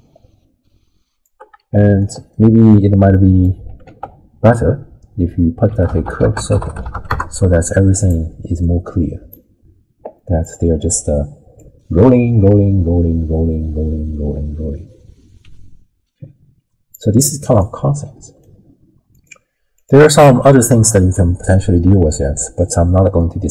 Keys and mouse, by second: 1.7 shift+click, 2.3 middle click, 3.1 click, 3.9 ctrl+a, 8.7-9.3 drag, 10.2 middle drag, 11.6-16.9 drag, 17.6 middle click, 19.1 click, 19.8 click, 23.2 middle click.